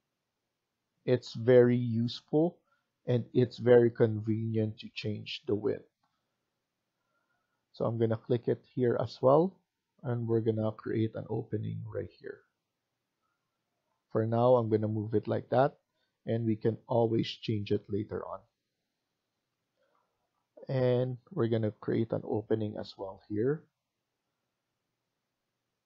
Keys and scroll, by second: 6.4 Escape, 6.7 Escape, 15.2 Escape, 15.4 Escape.